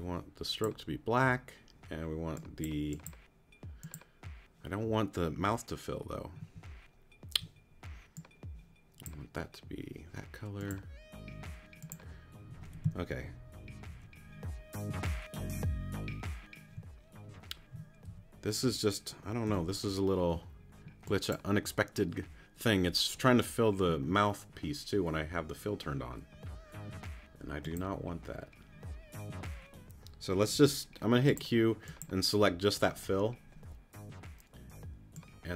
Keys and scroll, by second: 12.9 super+z, 18.1 a, 19.5 q, 30.5 q.